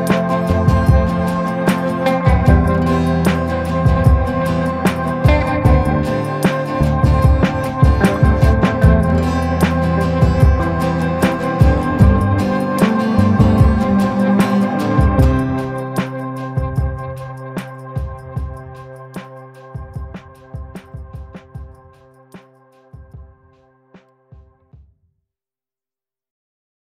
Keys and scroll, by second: 4.5 space, 4.8 F3, 9.8 shift+Page_Up, 15.5 shift+F2, 15.7 F3, 18.6 F3, 19.1 Escape, 19.4 F3, 19.7 Escape, 22.3 shift+F2, 24.3 F9.